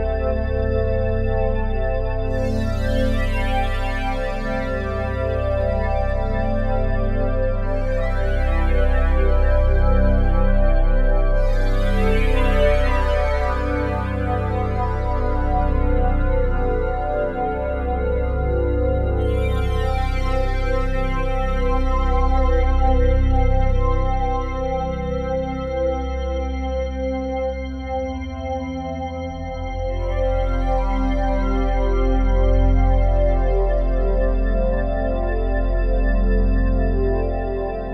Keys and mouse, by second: 0.2 Return, 0.8 i, 1.1-2.2 drag, 2.2 space, 3.5-3.9 typing, 3.9-7.8 drag, 7.6-9.4 typing, 8.3-9.4 drag, 12.6 click, 16.7 click, 17.7-18.7 typing, 18.5 click, 20.0 click, 21.9-22.6 typing, 22.6-30.2 drag, 26.9 typing, 30.9 click, 31.1-31.8 typing, 32.2 click, 33.1 click, 34.5-35.5 alt+drag, 34.6-36.0 typing, 36.2-37.9 drag.